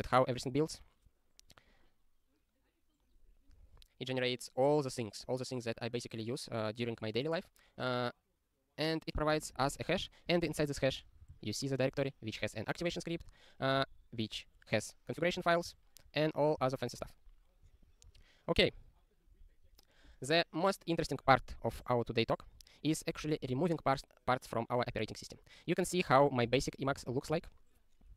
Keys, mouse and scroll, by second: 17.0 super+o, 18.1 click, 21.8 super+o, 27.4 Return.